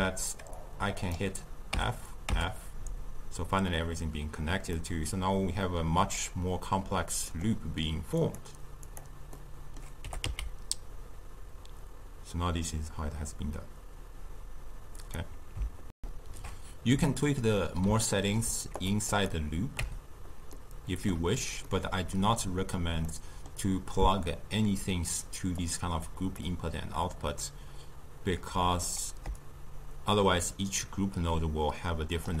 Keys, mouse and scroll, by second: 0.0 x, 0.6-1.8 drag, 1.8 f, 2.4 f, 4.8-7.8 middle drag, 8.3 click, 8.9 click, 9.5-10.1 middle drag, 10.1 g, 16.0 ctrl+alt+shift+w, 16.3 ctrl+shift+q, 18.0-18.8 ctrl+middle drag, 18.8 drag, 19.1 click, 19.8 Tab, 20.5-25.6 middle drag, 25.6 click, 28.4 drag, 29.4-32.4 shift+drag.